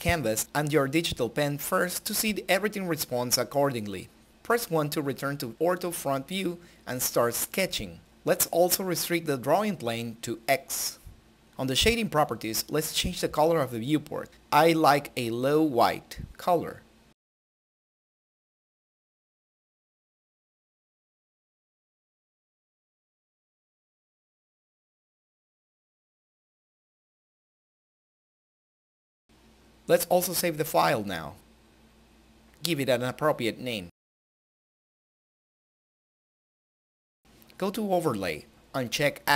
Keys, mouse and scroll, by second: 1.8-8.1 shift+middle drag, 9.0 click, 11.9-23.6 drag, 27.8 click, 31.8-34.6 typing, 34.7 click.